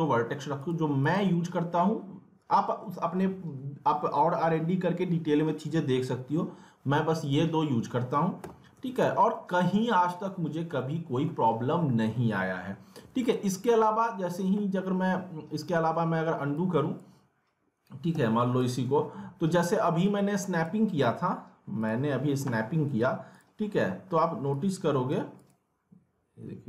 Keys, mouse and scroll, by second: 7.2 click, 7.9 middle click, 8.2-9.3 typing, 9.0 alt+middle click, 9.4 scroll down 1, 9.6 alt+middle click, 10.3 alt+middle click, 10.8-13.3 alt+middle drag, 13.3 alt+middle click, 14.4 scroll down 1, 14.5-16.5 alt+middle drag, 16.5-18.6 drag, 20.1-21.8 shift+drag, 22.5 typing, 23.3 click.